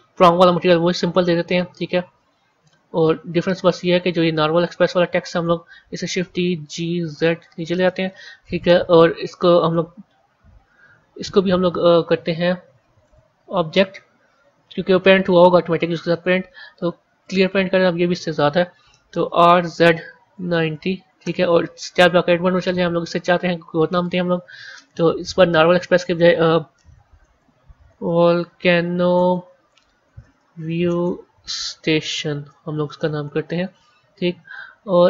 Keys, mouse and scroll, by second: 1.6-4.4 middle drag, 4.4 click, 6.1 shift+d, 12.9-15.9 drag, 19.2 r, 22.0 Tab, 22.6 scroll down 1, 22.6-23.1 scroll up 2, 24.4-24.7 BackSpace, 24.8-25.8 BackSpace, 27.1-32.3 typing, 33.8 Left, 34.3 Left.